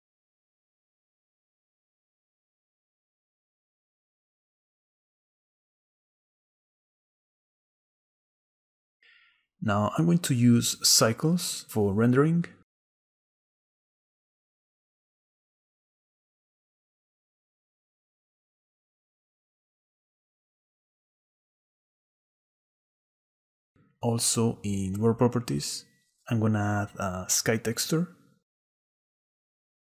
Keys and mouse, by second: 2.3-4.7 shift+right drag, 5.2 middle click, 5.8 shift+middle click, 9.4 click, 11.9-13.3 drag, 14.4-15.1 drag, 16.2 click, 18.7-19.1 shift+drag, 24.7 click, 27.6-29.1 drag.